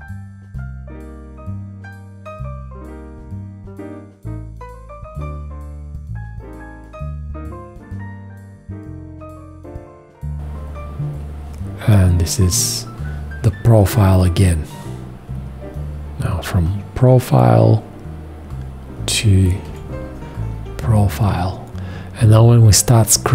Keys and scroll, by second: 19.6 4.